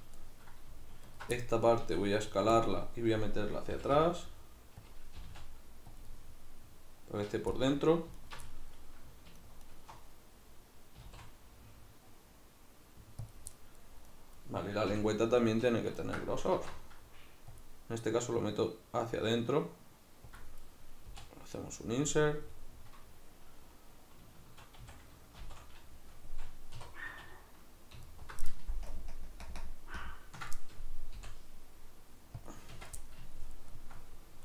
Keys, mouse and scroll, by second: 1.1 alt+right click, 1.4-3.7 middle drag, 1.9 s, 3.7 g, 4.9 click, 5.2 g, 6.0 click, 6.1-8.2 middle drag, 8.2 alt+right click, 8.5 middle click, 9.4 alt+shift+right click, 9.7 alt+shift+right click, 11.0 s, 13.3 click, 13.6 middle click, 14.0 right click, 14.9 l, 15.1-20.4 middle drag, 16.5 alt+e, 20.4 click, 21.1 i, 22.1-25.5 middle drag, 24.8 a, 25.5 shift+n, 26.8 3, 28.1 alt+right click, 28.9 ctrl+KP_Add, 29.5 ctrl+KP_Subtract, 31.2 i, 32.5 click, 32.7 Tab, 33.0-34.0 middle drag.